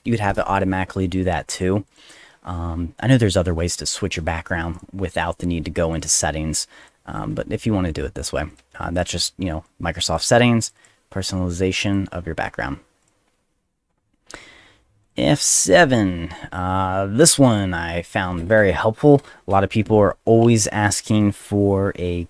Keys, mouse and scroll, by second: 1.9 click, 4.7 click, 5.8 click, 6.0 click, 6.8 click, 7.9 click, 8.5 click, 8.9 click, 9.6 click, 10.6 click, 10.8 click, 11.7 click, 11.9 click, 13.0 click, 14.5 middle click, 15.0 click, 17.4 click, 20.4 space.